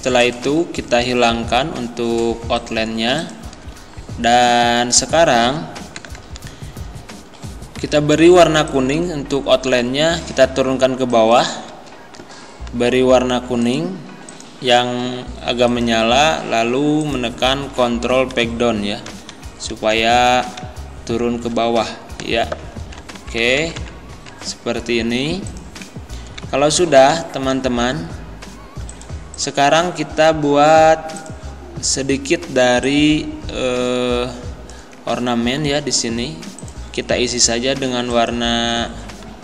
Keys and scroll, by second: 18.3 ctrl+Page_Down, 23.1 Up, 26.4 z.